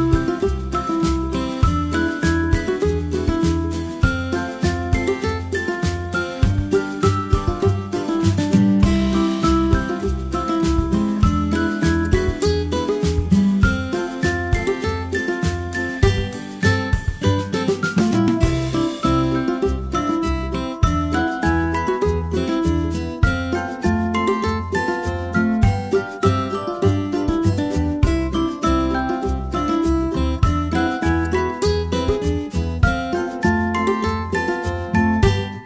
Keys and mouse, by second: 8.7 a, 14.0 KP_1, 15.4 e, 24.7 alt+p, 29.3 a, 29.7 g.